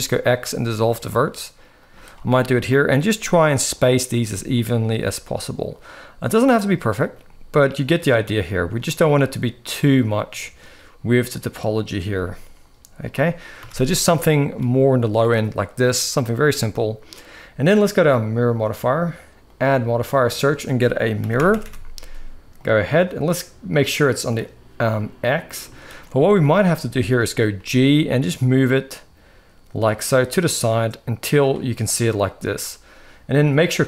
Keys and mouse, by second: 0.6 shift+middle click, 1.5 click, 1.7 x, 2.3 click, 2.7 g, 3.9 g, 4.8 g, 6.8 g, 8.0 click, 8.1 g, 10.1 shift+middle click, 11.7 x, 13.3 a, 13.8 shift+middle click, 19.1-22.4 drag, 21.3 r, 25.5 shift+middle click, 26.6 shift+middle click, 27.3 g.